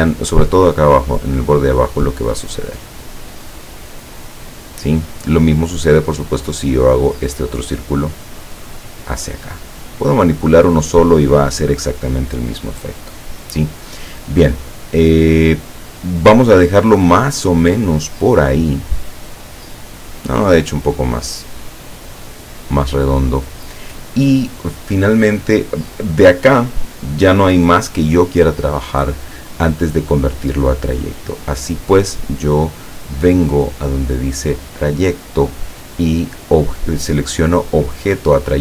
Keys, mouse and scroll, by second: 3.0-5.1 drag, 6.1-10.5 drag, 19.7-23.3 drag, 34.7 click.